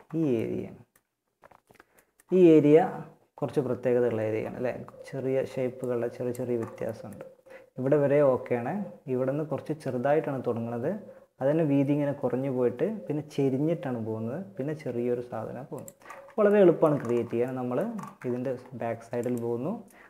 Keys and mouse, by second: 4.9-6.9 drag, 15.0 click.